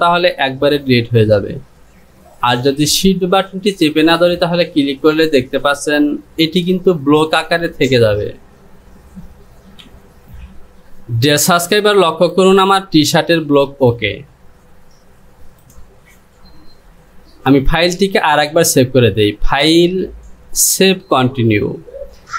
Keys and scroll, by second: 6.3 j, 9.9 j.